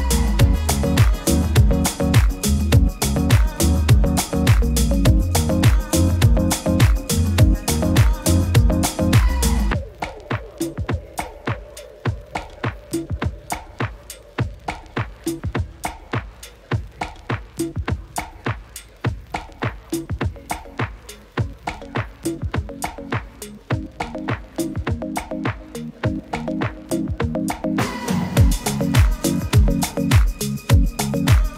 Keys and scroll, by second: 11.2 super+-, 11.4 super+-, 11.6 super+-, 13.2 super++, 13.3 super++, 13.4 super++.